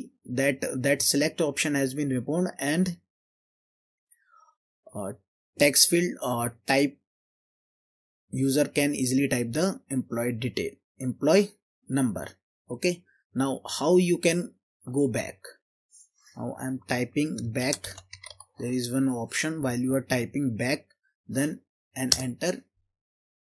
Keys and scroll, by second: 17.7-18.4 typing, 22.1 Return.